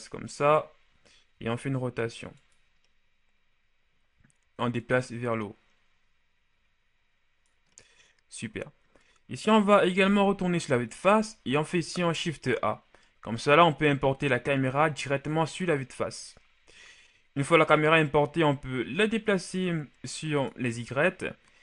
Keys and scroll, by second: 1.2 r, 9.4 KP_1, 11.9 shift+a.